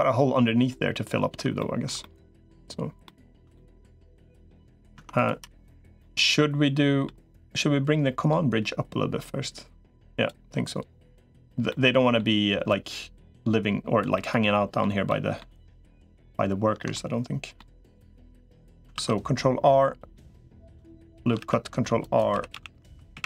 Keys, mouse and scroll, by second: 1.8 middle click, 2.8 middle click, 3.3 shift+middle click, 4.8 Tab, 5.6 l, 5.8-6.9 middle drag, 7.4-10.2 drag, 11.5 middle click, 12.6-13.8 drag, 13.9 middle click, 14.9 middle click, 15.6 middle click, 16.7 middle click, 18.0 middle click, 18.8 ctrl+r, 21.2 ctrl+r, 22.2-23.2 typing.